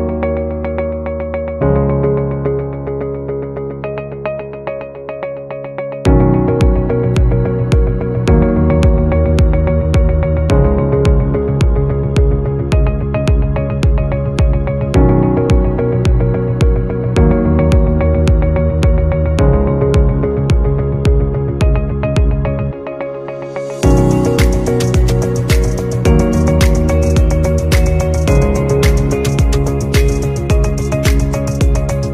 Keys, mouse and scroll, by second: 1.7 shift+click, 9.1 shift+click, 9.8 shift+click, 10.4 shift+click, 14.4 shift+click, 15.4 double click, 20.8-21.2 scroll down 1, 21.9 scroll down 1, 24.0-25.0 scroll up 1.